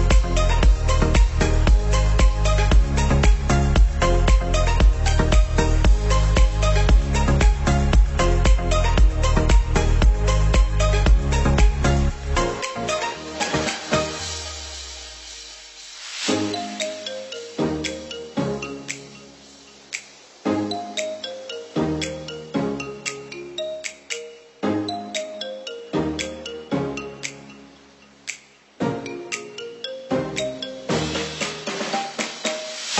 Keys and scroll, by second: 2.8 ctrl+=, 19.2 ctrl+z, 23.0 ctrl+z, 29.7 ctrl+-.